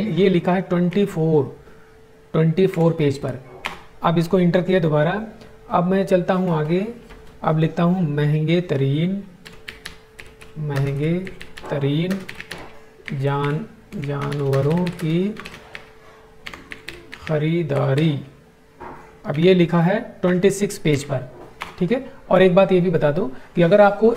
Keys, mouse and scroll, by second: 0.6 2, 2.3 4, 3.1 Return, 9.1-17.7 typing, 18.9 Tab, 19.8-20.7 typing, 21.3 Return.